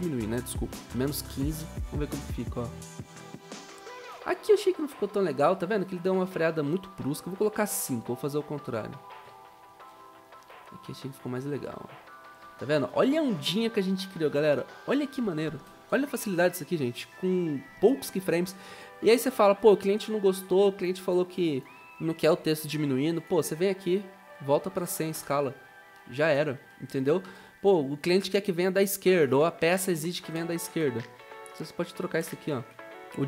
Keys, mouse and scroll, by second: 1.1-2.1 typing, 3.3-4.1 typing, 6.9-7.6 typing, 9.4-10.2 typing, 12.7-13.2 typing, 15.3-16.1 typing, 24.2-25.6 typing, 29.8-30.8 typing, 31.9-32.7 typing.